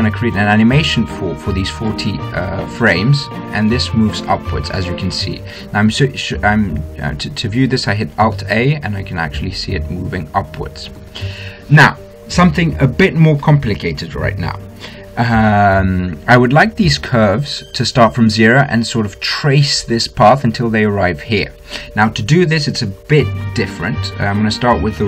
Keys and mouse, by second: 2.6 alt+a, 5.6 alt+a, 7.5-9.6 drag, 9.2 alt+a, 11.8 alt+a.